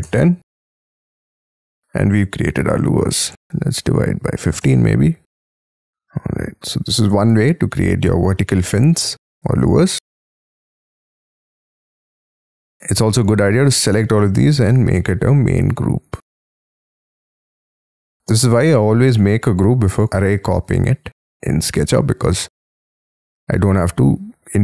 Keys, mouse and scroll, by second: 0.0-0.2 typing, 1.3 middle click, 2.0 scroll down 3, 3.3 /, 3.7 1, 4.4 5, 4.6 Return, 5.5 middle click, 6.0 scroll down 1, 10.0 space, 10.2-10.7 scroll up 12, 10.9 middle click, 12.1 space, 12.8-13.5 scroll up 5, 13.7 ctrl+click, 14.1 ctrl+click, 14.5 ctrl+click, 14.8-15.4 ctrl+scroll down 6, 15.4 ctrl+click, 15.9 ctrl+click, 16.3 ctrl+click, 17.0 ctrl+click, 17.4 ctrl+click, 17.8 ctrl+click, 18.0 ctrl+scroll down 6, 18.4 ctrl+scroll up 5, 19.0 ctrl+click, 19.5 ctrl+click, 19.9 ctrl+click, 20.6 ctrl+click, 21.3 ctrl+click, 21.8 ctrl+click, 22.1 ctrl+scroll up 6, 22.5 ctrl+click, 23.1-23.6 scroll down 12, 24.1-24.5 scroll up 5.